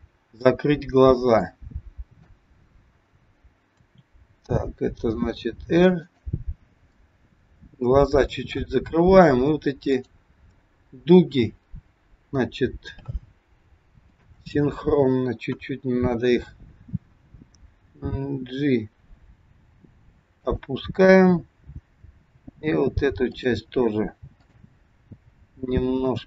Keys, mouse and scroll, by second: 1.2 click, 3.8 r, 7.0 middle click, 8.6-9.8 scroll up 2, 9.8 click, 14.0 shift+click, 15.6 KP_1, 17.8 g, 21.2 click, 22.2 g, 24.3 click, 25.3 g.